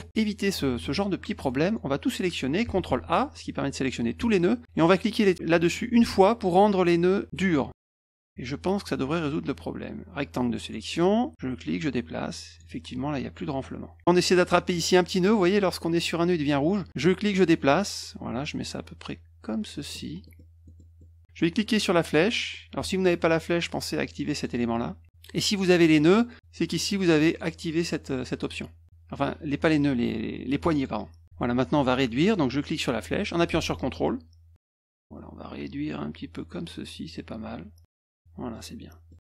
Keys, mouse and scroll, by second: 0.1 ctrl+z, 0.6 ctrl+z, 1.4 middle click, 2.9 ctrl+a, 8.0 click, 8.7 click, 9.8 click, 11.3-12.5 drag, 16.8-19.8 drag, 20.2 middle click, 20.6 middle click, 21.0 middle click, 23.7 click, 24.3 click, 27.2 click, 28.3 click, 30.6 click, 32.6-37.8 drag, 38.2 middle click, 38.8 middle click.